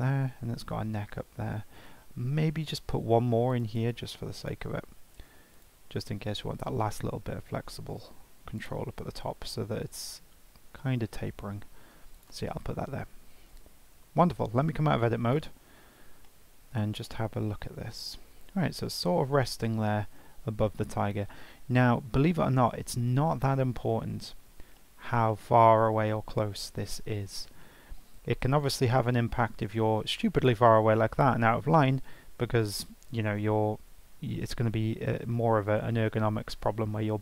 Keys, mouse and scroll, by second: 3.5 click, 3.7-5.5 right drag, 5.5 click, 8.6 click, 9.7 g, 15.3 Tab, 16.3-21.7 middle drag, 23.3-28.2 middle drag, 28.2-28.5 scroll down 2, 28.5-29.1 scroll up 2, 29.1-29.6 scroll down 1, 29.6 g, 31.4 alt+middle drag.